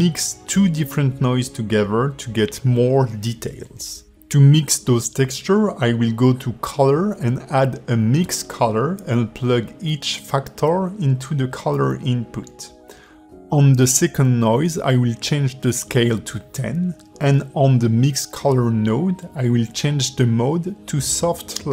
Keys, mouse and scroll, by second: 0.2 shift+middle click, 1.3 ctrl+shift+click, 3.5 shift+a, 10.0 click, 11.8 click, 16.6 click, 17.4 click.